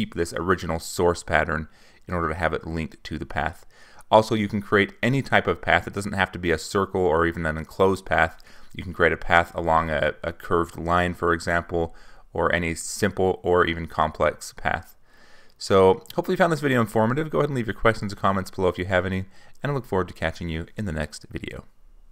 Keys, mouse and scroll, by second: 0.0-3.5 drag, 3.6 click, 3.6 right click, 5.7 -, 6.8 click, 7.7-13.3 drag, 14.3 click, 15.2-18.9 drag, 19.1 ctrl+z, 21.2 click, 21.5 click.